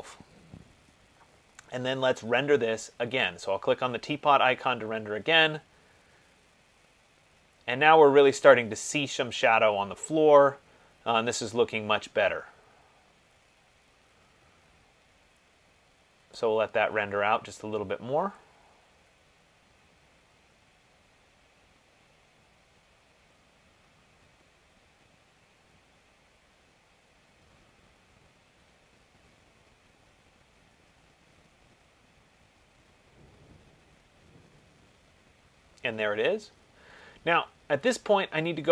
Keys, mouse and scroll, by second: 3.8 click.